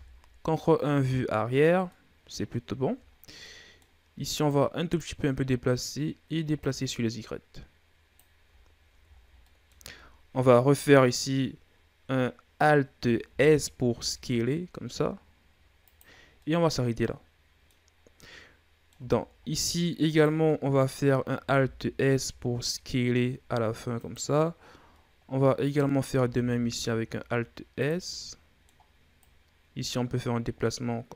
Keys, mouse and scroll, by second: 1.4-1.7 scroll down 2, 1.7 middle click, 2.6-2.9 scroll down 5, 2.9 scroll up 2, 3.3-4.3 middle drag, 4.3 click, 5.1-6.4 middle drag, 6.4-8.4 drag, 8.4-9.0 ctrl+scroll up 2, 9.0 shift+scroll down 1, 9.2-12.2 middle drag, 13.1 alt+s, 15.9-16.2 scroll down 1, 16.2-17.8 middle drag, 17.8 scroll down 2, 18.0 middle click, 19.0-19.3 scroll down 1, 19.3-19.9 scroll up 3, 19.9 right click, 20.3 middle click, 20.9-21.3 scroll up 1, 21.3 alt+s, 24.9-25.4 scroll down 1, 25.4 right click, 26.2 alt+s, 28.0-29.0 middle drag, 29.0 right click.